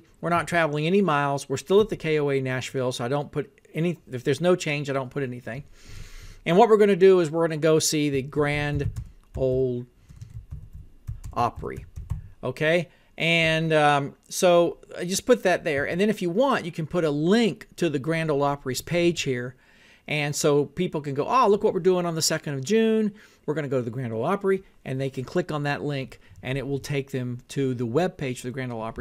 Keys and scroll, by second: 0.3 Tab, 1.8 Tab, 8.2-12.7 typing, 15.8 Tab.